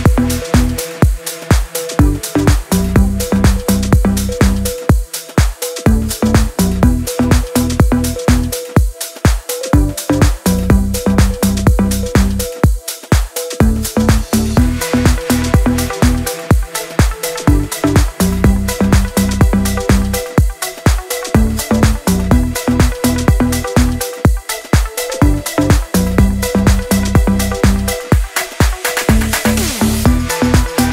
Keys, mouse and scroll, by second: 1.8 Down, 4.0-4.4 scroll down 1, 5.6 click, 6.2 shift+F4, 6.6 click, 8.1 click, 9.3-14.0 drag, 14.0 Down, 15.4-18.3 drag, 18.3 Up, 20.3-24.7 drag, 24.7 Down, 26.1-30.4 shift+drag, 30.4 ctrl+Page_Up.